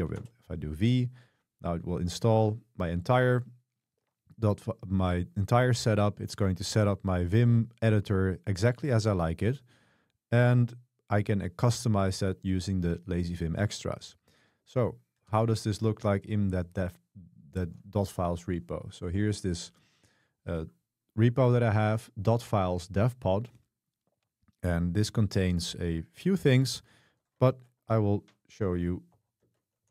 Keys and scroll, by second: 0.2 Return, 15.2 ctrl+b, 15.4 c, 18.1 super+1, 27.6 super+3, 29.2-29.9 typing.